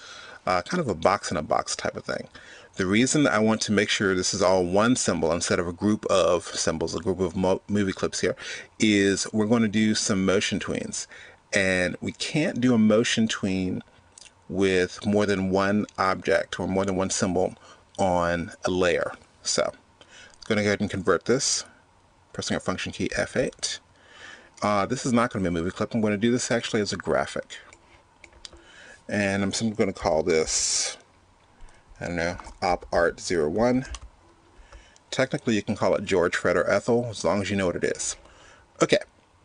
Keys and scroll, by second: 23.3 F8.